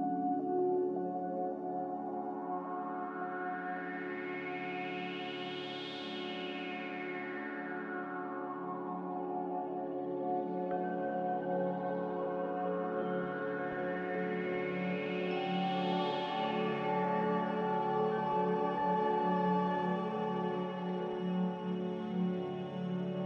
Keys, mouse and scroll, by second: 6.2 double click, 10.7 ctrl+z, 11.7 ctrl+z, 16.9-18.7 typing, 19.9-21.6 typing.